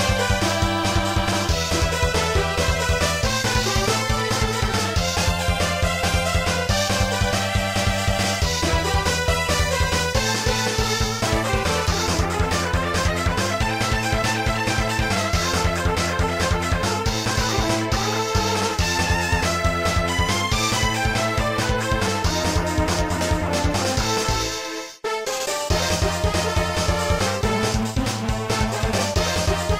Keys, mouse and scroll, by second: 2.8 click, 4.4 ctrl+s, 4.6 click, 8.3 ctrl+s, 8.6 click, 14.3 click, 17.4 click, 17.9 scroll up 2, 18.3 i, 19.4 click, 19.6 i, 20.9 click, 21.1 i, 23.4 ctrl+s, 24.4 0, 25.3 0, 26.1 3, 27.3 scroll down 2, 28.5-29.1 typing.